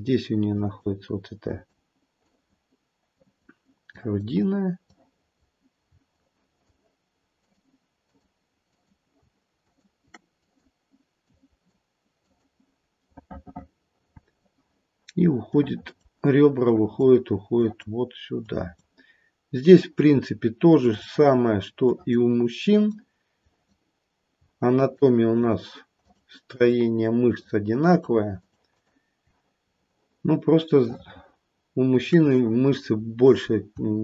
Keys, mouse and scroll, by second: 0.5 click, 1.5 click, 2.2 click, 3.1 click, 3.9 click, 4.8 click, 6.1 shift+click, 6.9 shift+click, 7.4 click, 8.0 shift+click, 8.6 shift+click, 9.6 shift+click, 10.4 click, 11.2 click, 13.3 middle click, 13.5 middle click, 15.5 click, 17.5 click, 18.4 click, 19.7 click, 20.7 click, 21.8 click, 22.6 click, 23.3 click, 24.8 shift+click, 25.4 shift+click, 25.9 shift+click, 27.3 shift+click, 28.3 shift+click, 28.7 shift+click, 29.6-30.8 scroll down 4, 30.8 middle click, 32.9-33.7 scroll up 3, 33.7 scroll up 2.